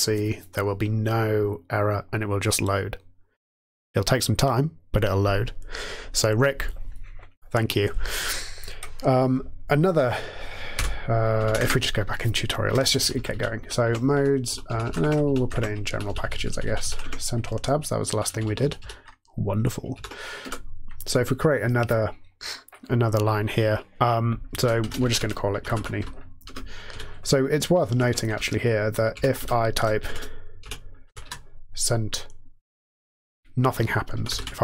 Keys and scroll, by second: 10.8 m, 11.4 Down, 11.6 Return, 13.3 Down, 13.8 Tab, 14.1 Down, 14.4 Down, 14.6 Up, 14.8 Up, 15.0 Tab, 15.2 Down, 15.5 Tab, 15.8 Down, 16.0 Down, 16.2 Down, 16.3 Down, 17.0 Tab, 17.4 Down, 18.0 Down, 18.2 Down, 18.4 Down, 19.9 ctrl+e, 20.4 alt+Return, 24.5-26.8 typing, 27.9 Up, 28.3 Return, 29.1 Up, 29.3 Return, 29.8-31.7 typing, 33.8-34.6 typing.